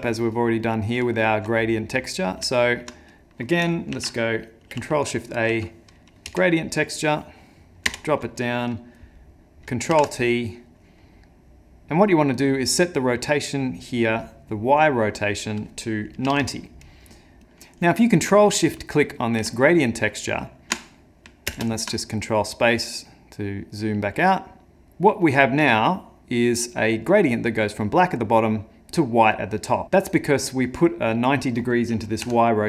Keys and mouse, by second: 0.6 middle click, 1.1 ctrl+middle click, 1.5 middle click, 2.1 middle click, 2.3 ctrl+middle click, 2.5 ctrl+middle click, 3.1 click, 3.9 ctrl+shift+a, 9.9 ctrl+t, 21.7 ctrl+space, 21.7 ctrl+shift+click, 25.3 click, 29.8 click, 30.2 click.